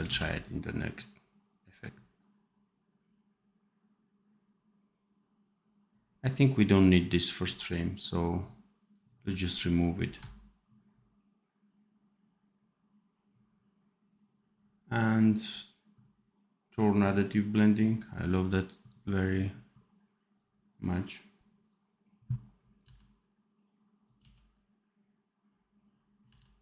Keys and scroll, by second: 0.0 ctrl+s, 22.7 v, 24.1 x, 26.2 v.